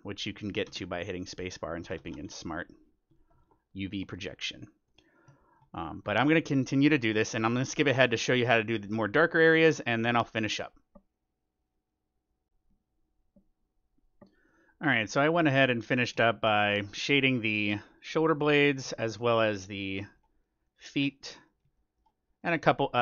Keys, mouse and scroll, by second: 0.0 click, 0.7 space, 4.9-7.3 middle drag, 7.3-7.9 scroll up 1, 9.6-12.3 middle drag, 14.4-19.8 middle drag, 20.0-23.0 middle drag.